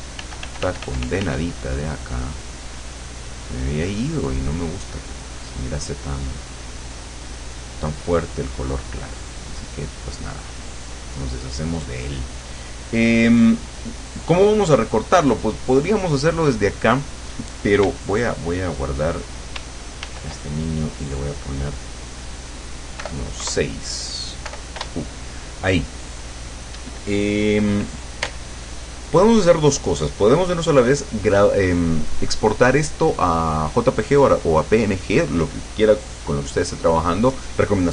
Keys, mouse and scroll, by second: 0.2 f, 0.7 click, 1.6-5.0 drag, 5.3 click, 6.0-7.9 drag, 8.0-11.0 drag, 12.3 click, 13.8 right click, 15.7 click, 20.0 ctrl+shift+s, 22.0 click, 23.1 BackSpace, 23.5 KP_Add, 24.6 BackSpace, 24.9 Return.